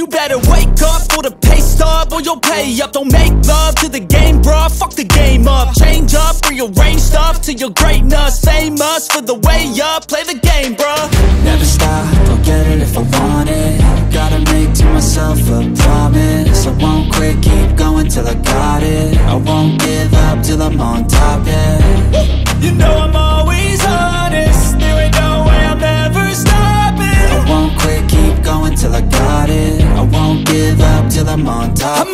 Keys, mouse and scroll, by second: 10.4 F4.